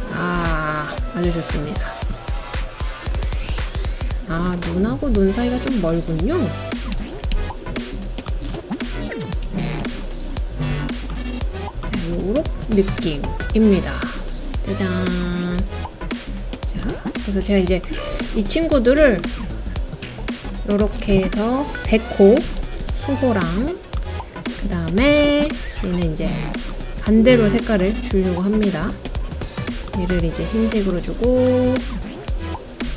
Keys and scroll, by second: 6.9 Left, 7.3 Left, 9.8 Right, 22.6 super+c, 22.8 super+v.